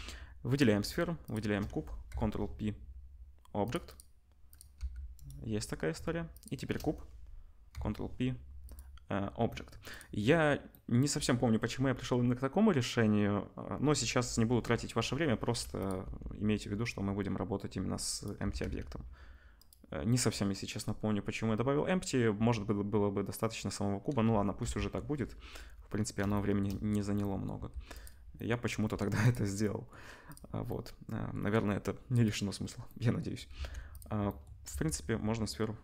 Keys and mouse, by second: 1.3-5.3 shift+drag, 2.1 ctrl+p, 3.8 middle click, 3.8 right click, 4.5 middle click, 4.5 right click, 4.7 g, 5.3-6.3 middle drag, 6.3 shift+click, 6.4-9.9 shift+middle drag, 7.7 ctrl+p, 9.9 click, 9.9-15.8 middle drag, 15.8 click, 15.8-30.3 middle drag, 16.0 r, 18.4 r, 24.6 /, 27.5 g, 28.8 g, 30.3 click, 30.3-32.2 middle drag, 32.2 click, 32.4-33.4 middle drag, 33.5 ctrl+s, 33.9 click, 34.7 s.